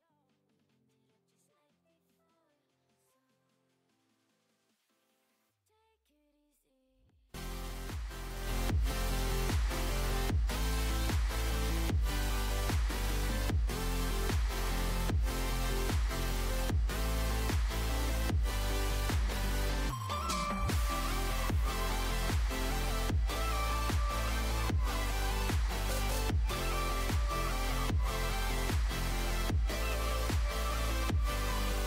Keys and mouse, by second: 8.2 middle click, 10.1-15.8 drag, 17.5-20.9 drag, 19.6-20.9 right drag, 20.9 middle click, 21.8-25.2 right drag, 23.2-25.2 drag, 23.2-25.2 middle drag, 25.8 Tab, 26.3-28.3 middle drag, 31.5 Tab.